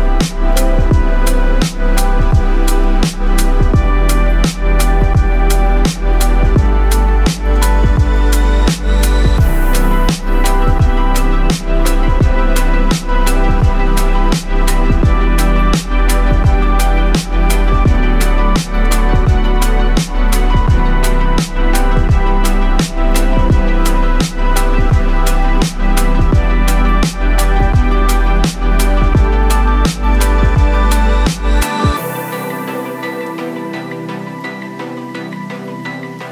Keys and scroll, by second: 0.0-0.1 typing, 2.9 typing, 5.6-9.2 typing, 10.3-17.8 typing, 10.5 ctrl+t, 12.7 ctrl+t, 19.1-36.3 typing.